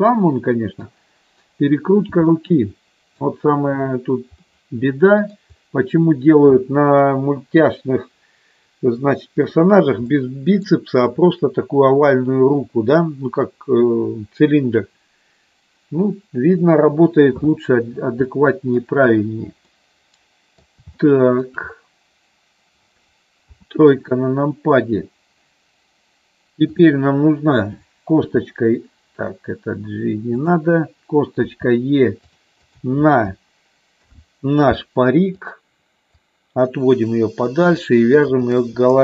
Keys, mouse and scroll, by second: 2.3 middle click, 4.3-5.6 middle drag, 10.0 middle click, 18.3 middle click, 19.5-20.6 middle drag, 21.0 shift+middle click, 23.6 KP_3, 26.7 click, 28.3 r, 30.4 click, 31.6 e, 32.2 click, 32.7 click, 34.1 alt+p, 36.2-37.4 drag.